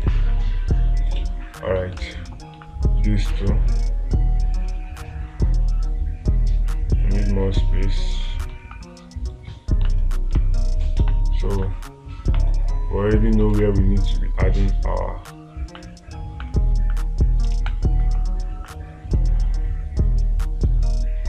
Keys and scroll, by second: 0.5 space, 2.4 space, 9.1 space, 10.8 space, 14.0 space, 18.0 space.